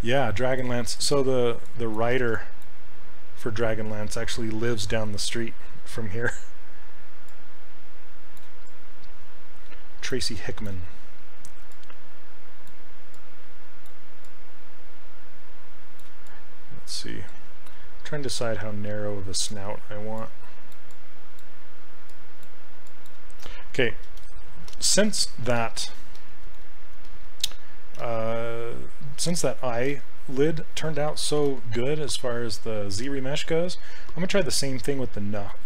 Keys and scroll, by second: 2.4 s, 11.7 s, 20.2 s, 28.0 s, 31.3 shift+f, 34.1 s.